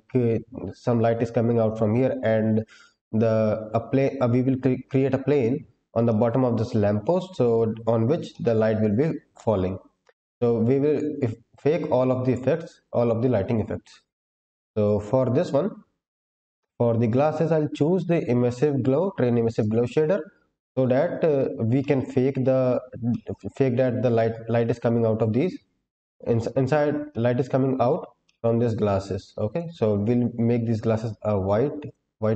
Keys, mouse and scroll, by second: 6.0-7.1 middle drag, 8.2 shift+middle click, 9.9-11.3 scroll down 2, 11.4-13.7 scroll down 3, 14.1-14.9 scroll up 4, 16.1-17.0 scroll down 2, 17.0-19.5 drag, 19.9-21.0 scroll down 3, 21.0-21.6 scroll up 1, 21.7 shift+middle click, 23.0 middle click, 27.0 middle click, 28.2 middle click, 29.4 click.